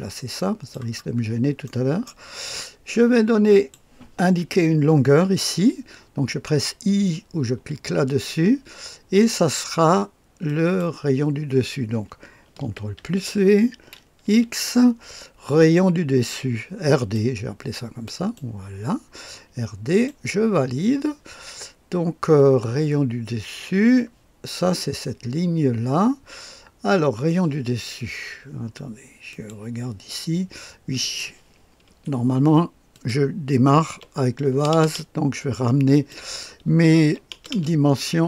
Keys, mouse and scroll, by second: 1.6 middle click, 1.6-2.4 scroll up 1, 3.5 click, 7.5 i, 10.4 click, 12.9 ctrl+v, 14.2 x, 16.9 click, 18.0 click, 19.9 click, 29.3 click, 31.0 click, 31.6 click, 31.8 KP_2, 32.1 KP_5, 32.9 click, 33.9 KP_2, 34.5 KP_0, 34.7 KP_0, 35.9 click, 37.0 KP_1, 37.3 KP_0, 37.5 KP_0.